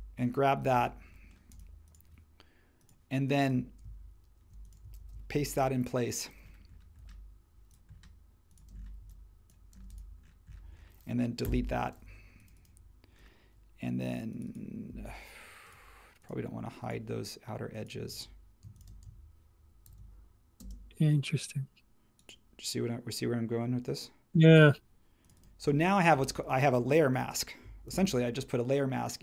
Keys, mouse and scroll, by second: 5.0 shift+v, 7.0 l, 8.7 space, 9.0 e, 9.7 space, 11.4 BackSpace, 19.8 shift+e, 20.6 space, 27.9 super+g.